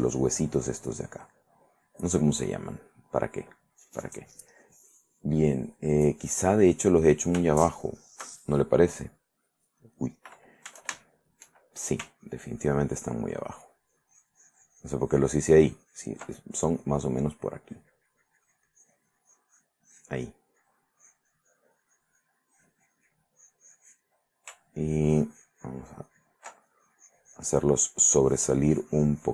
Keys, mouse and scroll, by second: 0.1 middle click, 1.5 middle click, 2.3 click, 7.0 middle click, 7.8 shift+middle click, 10.1 middle click, 11.2 shift+middle click, 12.2-16.4 ctrl+drag, 16.7-24.4 ctrl+drag, 24.7-26.7 ctrl+drag, 26.8-29.3 ctrl+drag.